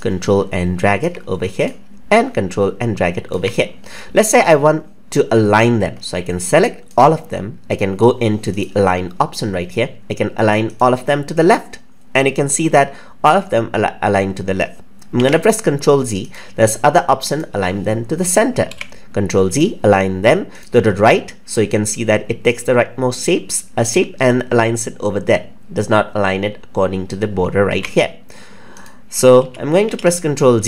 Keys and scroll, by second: 15.1 ctrl+z, 27.6 ctrl+x, 29.3 ctrl+z.